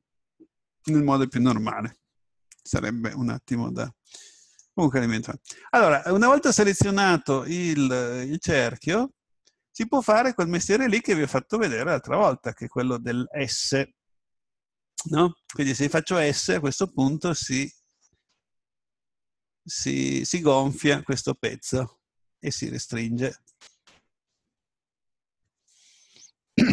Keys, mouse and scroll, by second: 3.5-7.8 middle drag, 16.9 s, 23.6 right click.